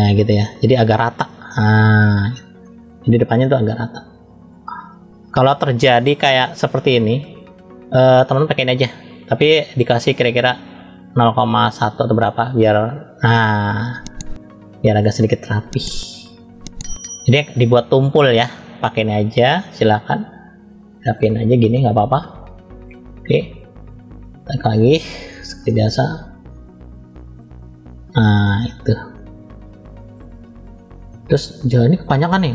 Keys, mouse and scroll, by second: 0.2 click, 0.9 middle click, 1.8 middle click, 2.6 middle click, 3.7 click, 5.2 scroll up 1, 6.4 shift+middle click, 8.5 click, 9.7-11.7 drag, 12.4 click, 13.3 click, 13.7 click, 14.8-15.4 scroll down 1, 15.4-16.4 middle drag, 15.4 scroll down 1, 16.9-17.4 scroll up 2, 17.9 scroll down 1, 18.5 scroll down 1, 19.4 click, 20.4 click, 22.4 scroll up 1, 22.5 middle click, 23.7 middle click, 25.6 shift+middle click, 27.2 click, 28.6 click, 29.0 middle click, 30.2 scroll down 1, 30.8 middle click, 30.8 scroll down 1, 32.0 middle click.